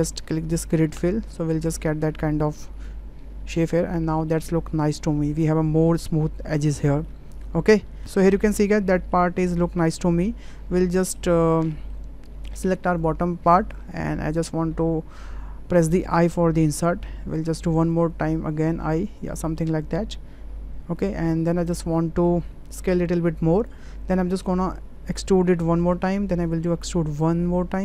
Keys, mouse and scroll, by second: 2.7 Tab, 4.3-5.2 middle drag, 7.2-8.1 ctrl+middle drag, 8.4-9.1 middle drag, 9.4-10.2 middle drag, 10.5 middle click, 11.0 shift+middle click, 11.4 Tab, 11.7 click, 12.6 3, 16.0 i, 18.5 i, 21.9 ctrl+middle click, 22.7 s, 25.0 e, 26.4 e.